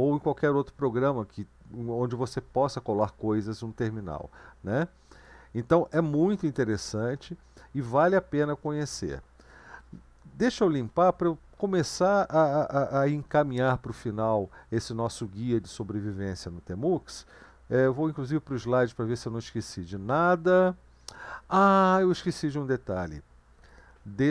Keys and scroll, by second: 7.2 BackSpace, 7.8 BackSpace, 7.8-8.6 BackSpace, 10.8 ctrl+l, 18.2 super+1.